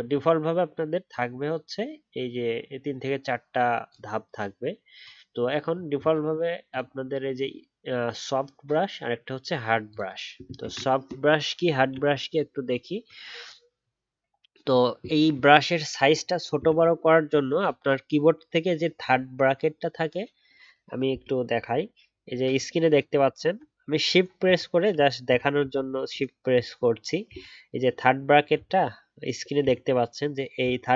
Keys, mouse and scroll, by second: 10.6 ctrl+z, 25.2 shift+[, 26.1 shift+[, 28.5-30.9 typing.